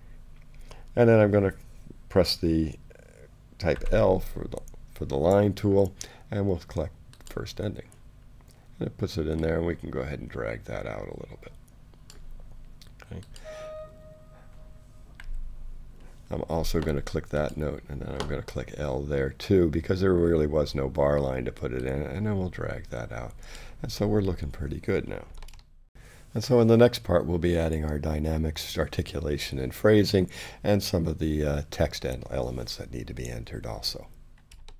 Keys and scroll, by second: 3.7 l, 15.4 l.